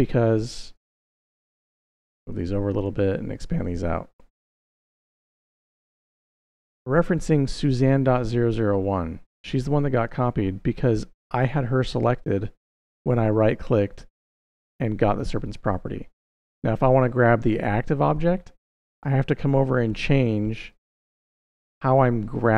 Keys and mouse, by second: 0.2 click, 1.4 g, 2.5 click, 3.1 shift+click, 3.8 shift+KP_6, 3.9 shift+KP_6, 5.4 click, 9.8 click, 13.2-15.3 middle drag, 20.5-21.8 drag.